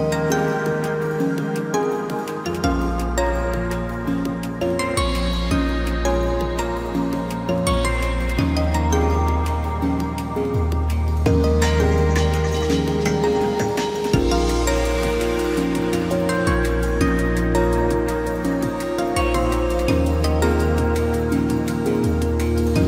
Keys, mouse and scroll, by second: 1.2 ctrl+-, 3.0 ctrl+t, 15.8 ctrl+j.